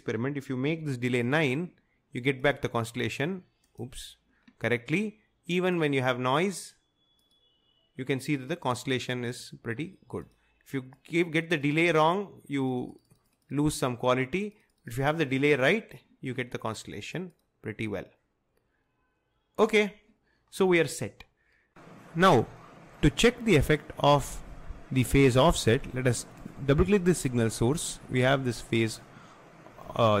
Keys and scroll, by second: 0.8 9, 1.1 Return.